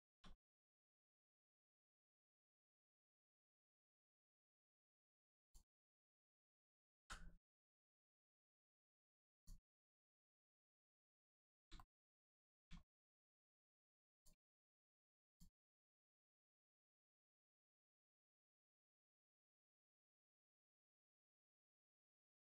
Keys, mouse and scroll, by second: 0.3-0.6 scroll down 1, 0.7 shift+middle click, 1.3 middle click, 1.4 middle click, 1.8 scroll up 1, 2.2 shift+middle click, 3.4 middle click, 3.7 middle click, 4.4-5.1 scroll up 1, 5.4 click, 5.8 shift+click, 6.2 shift+middle click, 7.0 m, 9.3 click, 10.1 middle click, 11.0 shift+middle click, 11.3-11.6 scroll down 1, 11.7 shift+middle click, 12.0 middle click, 12.1 middle click, 12.8 shift+middle click, 14.1 click, 15.3 shift+click, 15.9 middle click, 18.1 middle click, 19.1 shift+middle click, 19.4 scroll up 1, 20.8 click.